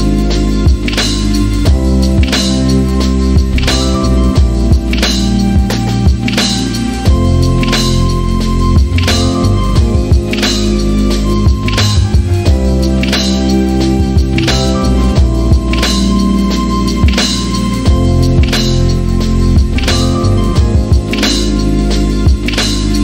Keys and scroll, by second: 2.3 x, 3.4-6.1 typing, 6.8 Down, 6.9 Return, 9.8-10.6 typing.